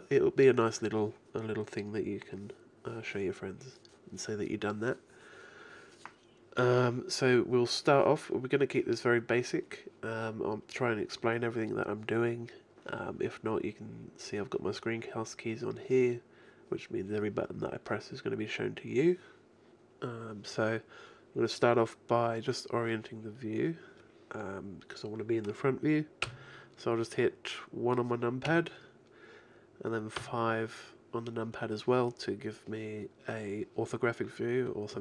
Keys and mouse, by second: 27.6-30.2 middle drag, 28.5 KP_1, 30.2 KP_5.